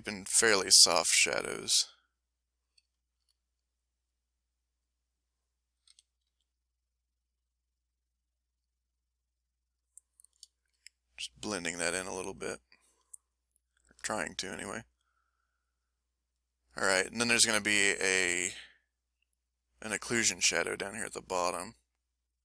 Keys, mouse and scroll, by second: 2.9 ctrl+click, 3.7 ctrl+click, 4.3 ctrl+click, 5.9 s, 6.3 f, 6.4-8.8 drag, 8.9-10.0 drag, 10.1 click, 10.6 ctrl+middle click, 11.5-12.9 ctrl+drag, 13.2 ctrl+middle click, 13.7 ctrl+middle click, 14.1-16.0 ctrl+middle drag, 16.0 ctrl+middle click, 16.9-20.5 ctrl+drag, 20.5 middle click, 21.2-22.4 drag.